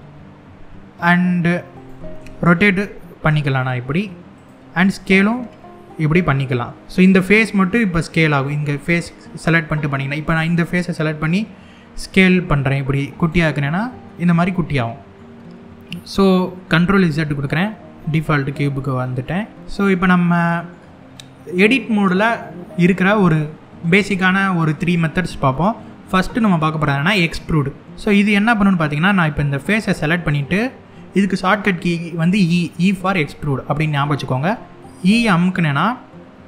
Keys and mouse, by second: 1.4 click, 1.8 r, 4.0 click, 4.8 s, 6.7 click, 7.8 middle click, 10.0 click, 11.6 s, 12.8 click, 13.3-14.6 middle drag, 16.3 ctrl+z, 16.5 ctrl+z, 18.5 middle click, 19.6 middle click, 28.7 3, 29.3 click, 34.8 e.